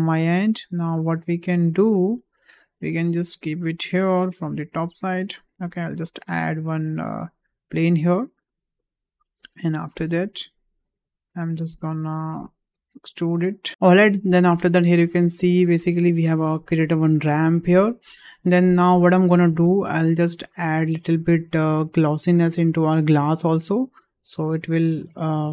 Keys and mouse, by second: 0.3 shift+middle click, 2.9-4.4 drag, 5.9 shift+a, 6.8 s, 8.5-8.8 middle drag, 9.2 Tab, 9.7 shift+middle click, 10.3 2, 11.3 click, 12.2 e, 14.5-15.1 middle drag, 17.5 KP_0, 19.0-19.5 shift+middle drag, 19.9 middle click.